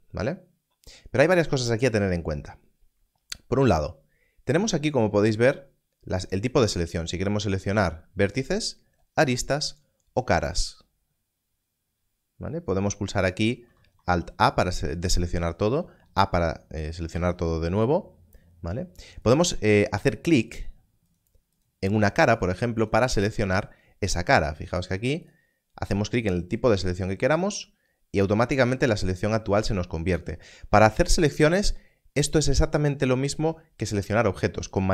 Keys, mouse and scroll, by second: 6.2 click, 8.2 click, 11.9 click, 13.6 alt+a, 15.5 a, 17.0 alt+a, 19.2 click, 25.2 click, 28.2 click.